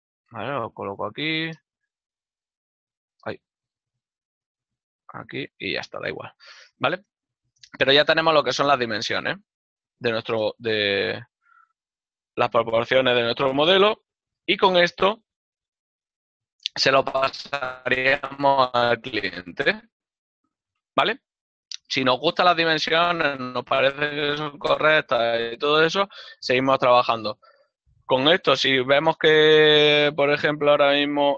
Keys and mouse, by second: 2.1 y, 3.6 shift+y, 6.5 ctrl+middle click, 9.5 click, 9.9 ctrl+middle click, 12.0 click, 14.2 click, 14.5 shift+middle click, 19.3 t, 19.7 shift+middle click, 26.2 right click.